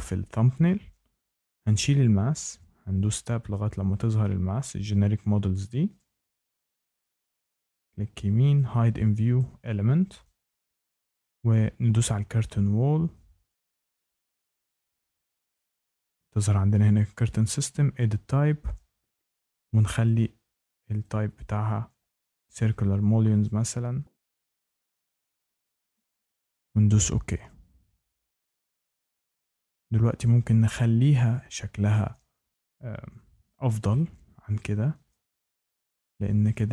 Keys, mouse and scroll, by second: 1.1 Escape, 2.1 Tab, 3.4 click, 6.4 Tab, 6.4 click, 7.1 right click, 8.5 click, 9.3 click, 12.0 click, 13.4 click, 14.5 click, 17.6 click, 20.0 click, 20.6 click, 20.9 click, 21.3 click, 23.4 click, 24.0 click, 24.3 click, 24.4 click, 24.6 click, 24.8 click, 25.0 click, 25.1 click, 25.4 click, 25.6 scroll down 1, 25.9 click, 26.1 click, 26.2 click, 26.4 click, 27.3-27.8 scroll, 27.4 click, 31.8 shift+middle click, 32.7-33.5 scroll, 34.8 scroll down 10, 34.9 scroll up 10, 35.6 scroll, 36.2 scroll, 36.2 scroll down 1, 36.6 scroll down 1, 36.6 scroll up 1.